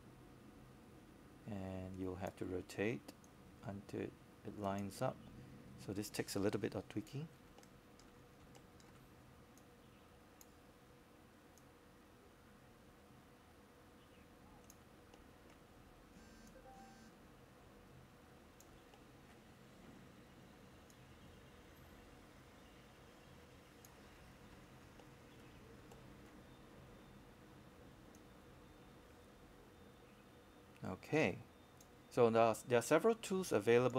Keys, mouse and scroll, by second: 0.3 shift+click, 0.8 shift+click, 1.2 shift+click, 3.8-6.0 drag, 6.4 scroll down 1, 9.0 click, 11.5-12.5 scroll up 1, 12.5-14.0 drag, 14.2-14.9 scroll down 1, 15.6 click, 16.6 scroll up 1, 18.1-24.0 drag, 24.6-25.1 scroll up 1, 25.1 scroll down 1, 25.7-26.1 scroll up 1, 26.6 alt+middle click, 27.2 scroll up 1, 27.6 alt+middle click, 28.7-33.9 drag.